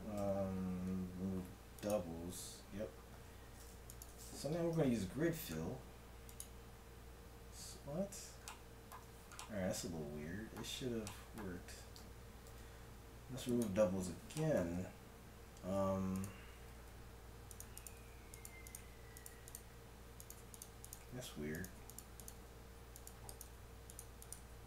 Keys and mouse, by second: 0.2 ctrl+v, 3.2 a, 3.9-5.5 right drag, 4.7 ctrl+f, 8.7 middle click, 9.0 middle click, 11.5 a, 11.8 a, 12.5 ctrl+v, 14.8 Tab, 15.7 Tab, 16.9 g, 17.9 g, 18.8 g, 19.5 g, 21.0 g, 22.4 g, 23.4 g, 24.4 g.